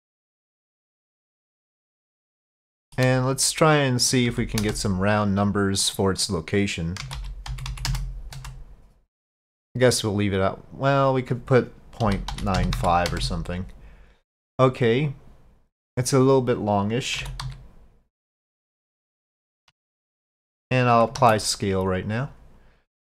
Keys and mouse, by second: 0.7 middle click, 1.9 middle click, 2.7 shift+middle click, 3.8-5.6 drag, 5.9-9.8 drag, 11.1-14.3 drag, 17.2 s, 21.2 ctrl+a.